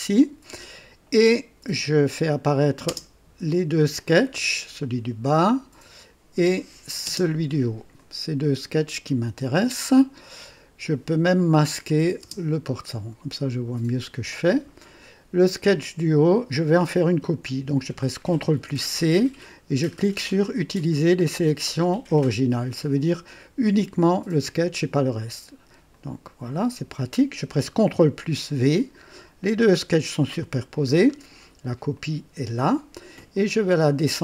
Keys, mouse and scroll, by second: 1.7 click, 2.8 space, 4.0-6.0 drag, 6.5 click, 7.0 space, 7.9-10.5 drag, 11.8 click, 12.2 space, 12.2 space, 15.7 click, 18.4 ctrl+c, 25.9 click, 28.3 ctrl+v, 30.8 scroll down 1, 31.9 click, 33.3 click, 33.8 click.